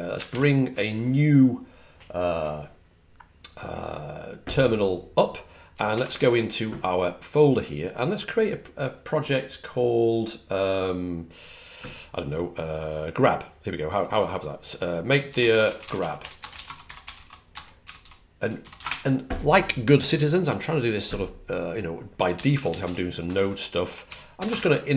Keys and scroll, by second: 5.5-6.5 typing, 14.7-19.1 typing, 22.0-24.9 typing.